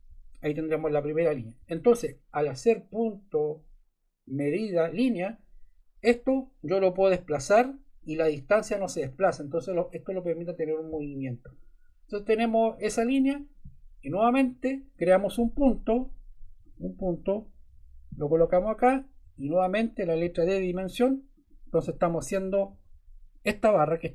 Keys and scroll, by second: 1.5 Escape, 19.2 Escape, 20.2 d, 22.7 Escape.